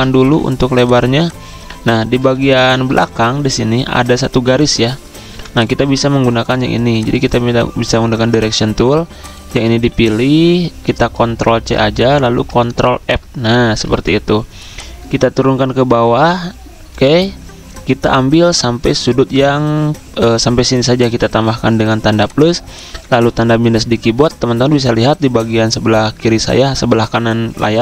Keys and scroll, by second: 4.9 v, 5.2 v, 11.4 ctrl+c, 13.0 ctrl+f, 13.9 v, 20.5 =, 22.8 -.